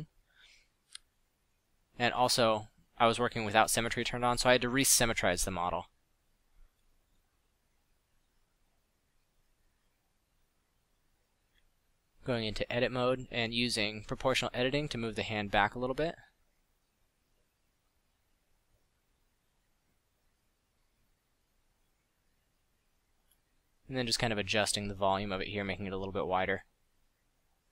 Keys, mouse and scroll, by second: 0.8-1.1 middle drag, 1.4-2.0 middle drag, 2.0 ctrl+z, 3.4 middle drag, 4.8-6.6 middle drag, 9.3 KP_7, 9.6 KP_5, 11.3 Tab, 11.6 a, 11.9 z, 12.1 b, 14.6 middle click, 16.6-17.9 middle drag, 17.7 scroll up 1, 19.3 a, 19.5 b, 21.0 b, 26.5 a, 26.6 z, 26.8 z, 27.4 alt+z.